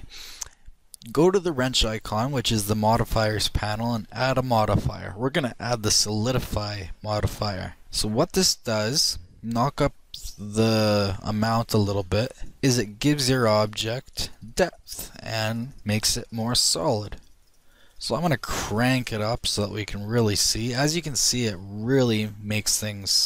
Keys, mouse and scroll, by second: 1.6-4.5 middle drag, 2.8-6.5 drag, 10.3-21.8 drag.